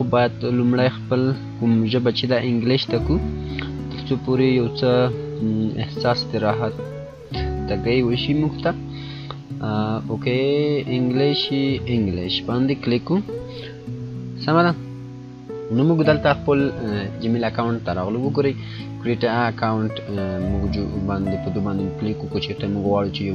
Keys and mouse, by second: 2.6 F9, 2.8 click, 7.4 click, 7.7-11.0 drag, 12.3 click.